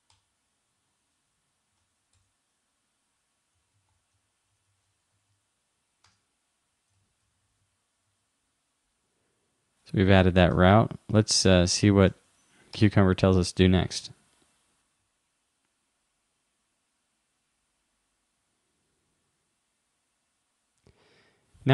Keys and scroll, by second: 1.8 super+Right, 6.9 shift+;, 8.1 super+s, 10.6 super+Tab.